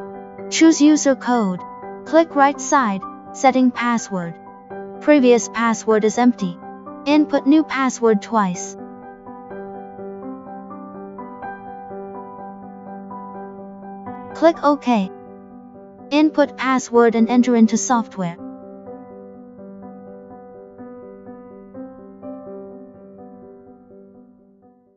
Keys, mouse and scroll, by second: 1.1 click, 1.6 click, 2.8 click, 3.8 click, 6.3 click, 11.2 click, 15.4 click, 16.4 click, 20.7 click, 21.8 click.